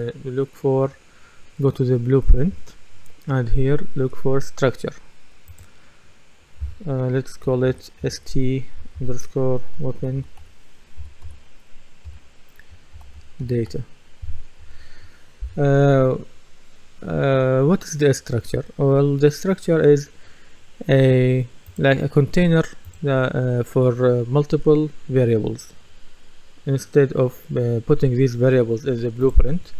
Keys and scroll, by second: 7.7 shift+s, 8.0 shift+t, 9.8-14.2 typing, 14.6 Return.